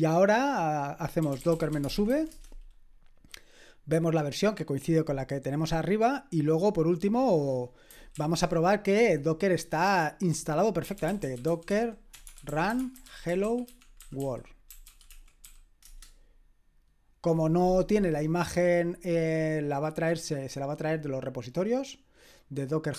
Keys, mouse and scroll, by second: 1.0-2.5 typing, 5.7-6.5 scroll down 1, 6.5-7.9 scroll down 1, 7.9 scroll down 1, 8.1 ctrl+l, 10.6-15.9 typing.